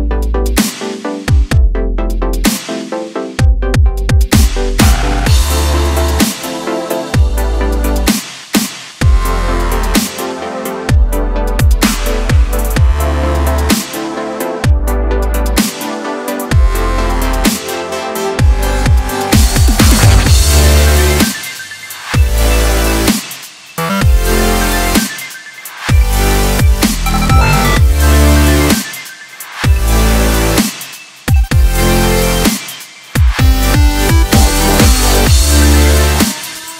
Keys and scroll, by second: 2.2 z.